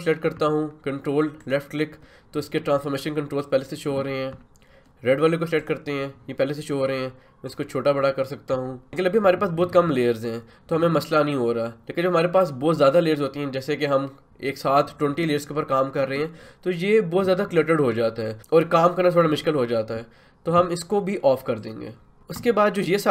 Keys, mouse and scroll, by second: 1.4 ctrl+click, 5.6-8.9 ctrl+drag, 6.4-7.1 typing, 8.9 Return, 21.6 click.